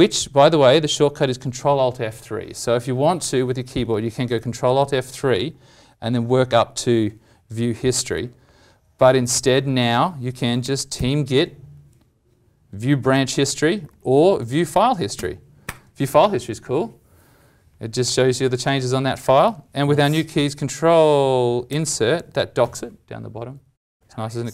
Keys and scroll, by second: 4.8 ctrl+alt+F3, 10.6 alt+m, 21.7 ctrl+Insert.